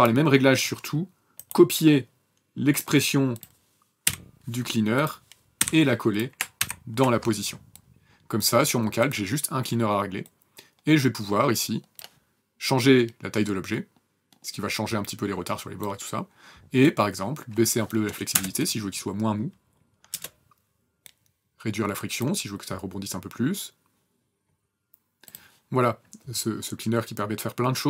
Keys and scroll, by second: 3.9 l, 5.4 p, 6.5 ctrl+v, 18.2 KP_0, 19.9 KP_0.